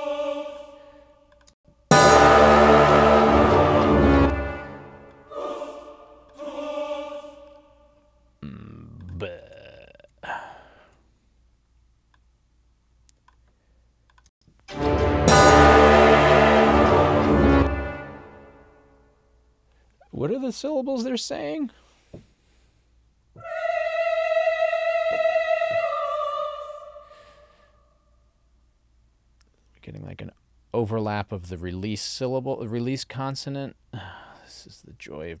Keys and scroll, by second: 1.6 space, 4.1 space, 9.8 alt+Right, 14.3 space, 17.5 space.